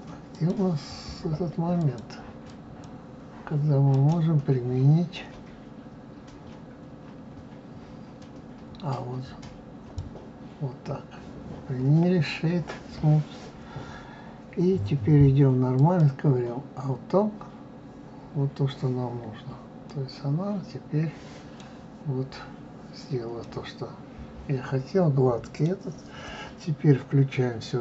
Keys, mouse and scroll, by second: 0.3 click, 1.8-3.9 drag, 3.9-15.7 right drag, 15.7 click, 19.3-19.9 scroll down 2, 19.9-22.9 middle drag, 23.4-26.4 middle drag.